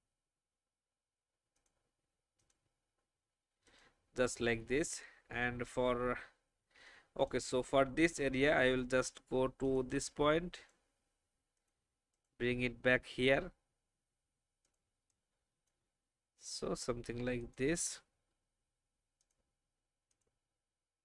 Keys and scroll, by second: 6.9 space, 7.9 alt+space, 14.9 space.